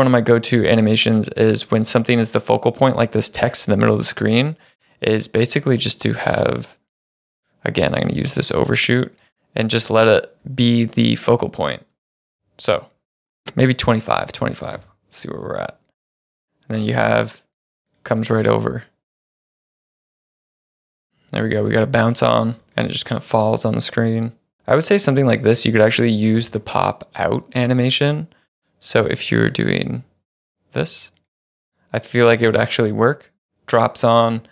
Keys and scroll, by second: 13.4 Home, 14.8 space, 17.6 space, 20.3 space, 24.6 space, 26.4 space, 31.4 space.